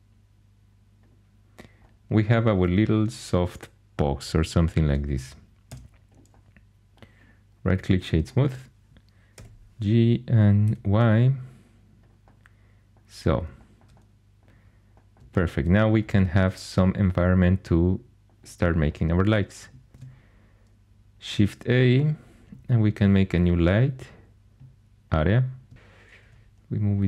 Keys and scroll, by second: 6.3 Tab, 9.3 g, 10.6 y, 19.9 shift+a, 26.2 g.